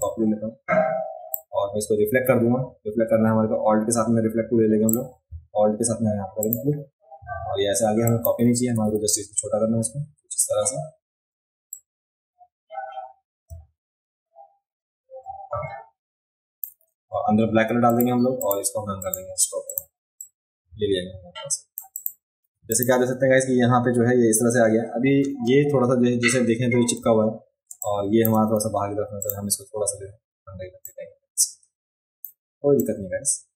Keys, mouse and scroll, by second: 0.0-1.3 alt+drag, 4.8 click, 6.4 alt+click, 8.0 click, 11.7-16.6 drag, 17.9 click, 18.4 click, 19.0 click, 19.6 click, 20.2-21.7 drag, 21.9 click, 22.7 click, 27.6 space, 27.8 click, 29.2 click, 30.8-32.2 drag, 32.8 click.